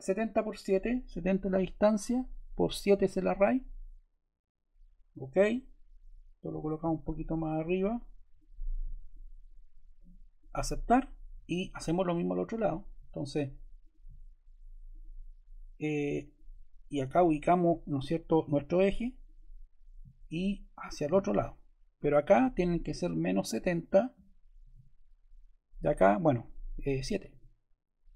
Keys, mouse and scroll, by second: 13.7 click, 19.1-20.3 drag, 21.0-22.2 drag, 23.0-24.0 drag, 23.8-25.1 typing, 27.1 typing.